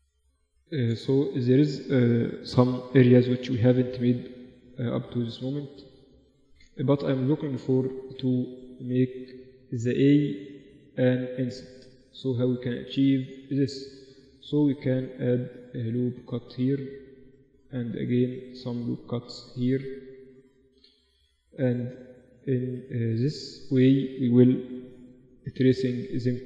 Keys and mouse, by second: 0.3 Tab, 1.2-3.8 middle drag, 5.3-10.7 middle drag, 10.7 Tab, 11.9 Tab, 12.3 Tab, 13.1 Tab, 13.3 Tab, 14.4 ctrl+r, 18.2 ctrl+r, 21.4 click, 21.5-25.1 middle drag, 24.3-26.0 drag, 25.1 g, 26.0 right click, 26.1 g.